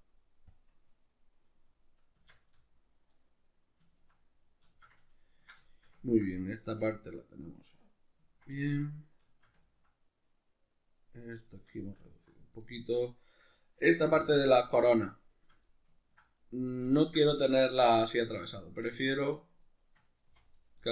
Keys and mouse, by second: 2.2 Tab, 2.5 z, 3.9-14.4 ctrl+middle drag, 14.1 3, 14.4 right click, 14.8 shift+right click, 15.1 shift+right click, 15.3 shift+right click, 15.7-17.5 middle drag, 17.5 right click, 17.9-19.3 middle drag, 19.6 shift+right click, 19.8 shift+right click, 20.3 x.